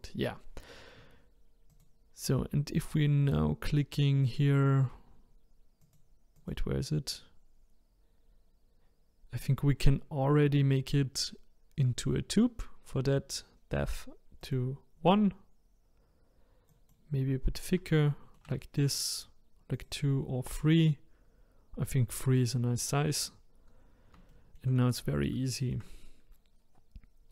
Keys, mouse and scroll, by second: 1.7 click, 4.3 click, 5.8 click, 6.4 click, 14.4 click, 18.0-19.8 shift+middle drag, 19.8-21.9 drag, 24.3 shift+middle click, 24.8-25.4 scroll up 3, 25.5-27.3 shift+middle drag.